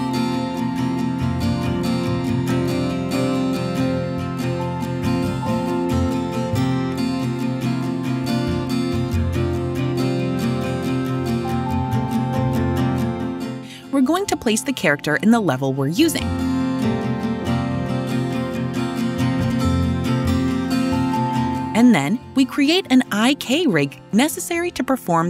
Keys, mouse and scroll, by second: 5.2 click, 5.4 click, 13.0 click, 13.9 right click, 16.4 click, 17.2-20.8 typing, 20.3 right click, 22.2 right click.